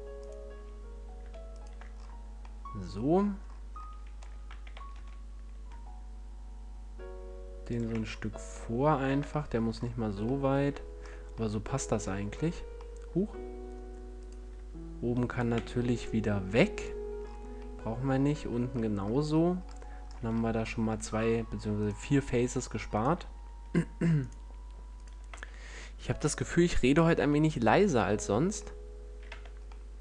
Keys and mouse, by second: 1.9-5.8 drag, 7.7-12.0 drag, 7.9 a, 14.1-17.0 right drag, 15.5 x, 17.0-19.8 middle drag, 21.7-26.7 middle drag, 26.8 middle click, 29.2 Tab.